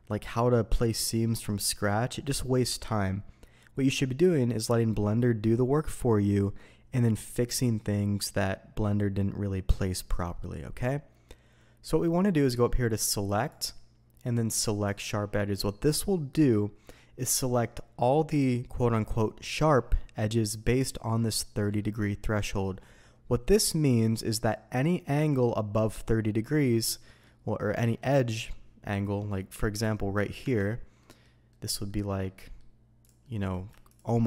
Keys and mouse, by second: 11.3-12.1 middle drag, 13.3-15.0 drag, 26.8-27.2 middle drag, 30.4 Tab, 31.0 middle click, 31.5 middle click, 31.9-32.2 middle drag, 32.4 middle click, 33.2 middle click, 33.9-34.2 shift+middle drag.